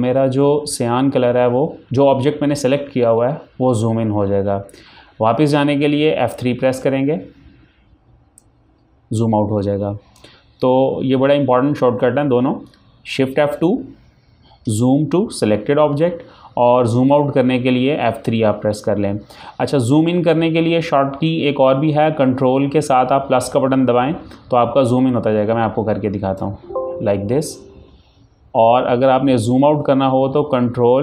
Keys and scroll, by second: 6.7 F3, 26.5 ctrl+Num_Lock, 26.6 ctrl+KP_Add.